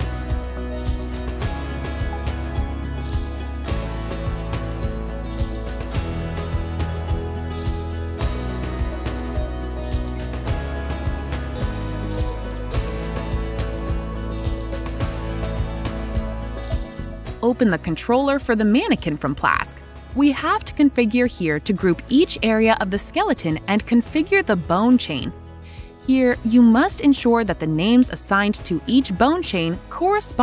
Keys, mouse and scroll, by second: 1.5 click, 4.0 typing, 11.1 click, 11.3 click, 16.8 click, 16.9 click, 23.8 click, 24.7 ctrl+click, 25.4 ctrl+click, 26.4 click.